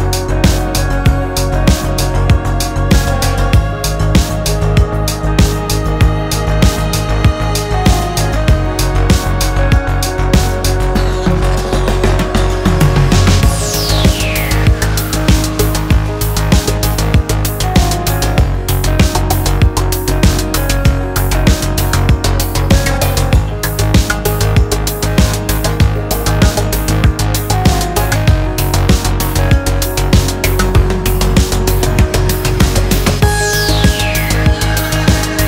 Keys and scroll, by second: 16.3 super+s, 16.7-19.5 typing, 20.0 Return.